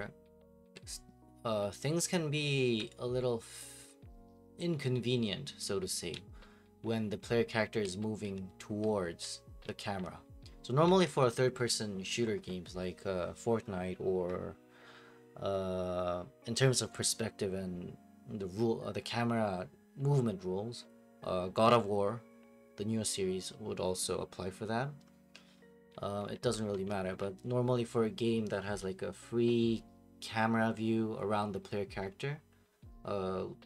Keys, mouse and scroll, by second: 0.0-2.8 typing, 5.9-11.2 typing, 25.7-27.5 typing.